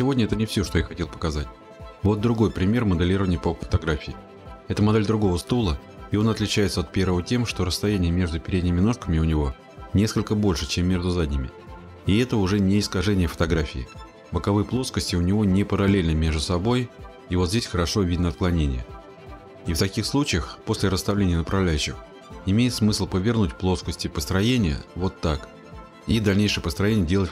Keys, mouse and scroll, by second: 0.2-1.1 scroll, 4.8 click, 6.7 click, 8.4 click, 8.6 click, 8.8 click, 9.3 right click, 10.9 click, 12.8 click, 14.3 middle click, 14.4 middle click, 14.4 middle click, 15.2 scroll, 18.3 scroll, 20.0 middle click, 21.0 scroll, 21.4 click, 23.6-24.0 scroll, 24.0 middle click, 24.0 middle click, 24.1 middle click, 24.2 middle click, 26.4 click, 26.5-26.9 scroll.